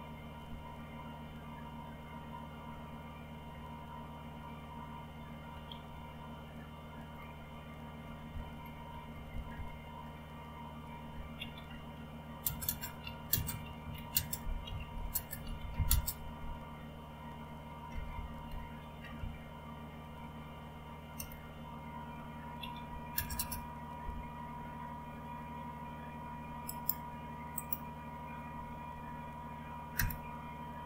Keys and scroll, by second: 0.4-3.5 Down, 3.5-5.8 Page_Down, 5.8-8.9 Up, 8.9 Down, 9.1-10.0 typing, 11.1-15.9 typing, 17.6-19.2 typing, 20.9-23.3 typing, 29.9 Return.